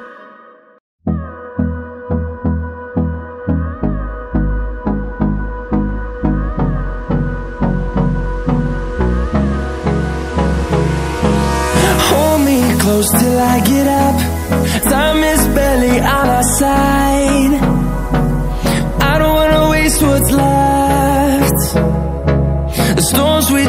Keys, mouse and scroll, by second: 2.0 Left, 2.3 Down, 2.7 click, 3.8 ctrl+alt+scroll down 1, 4.6 click, 7.7 right click, 9.3 click, 11.6-20.0 drag, 20.0 ctrl+alt+scroll up 2, 20.8-22.4 drag, 22.4 ctrl+alt+scroll down 1.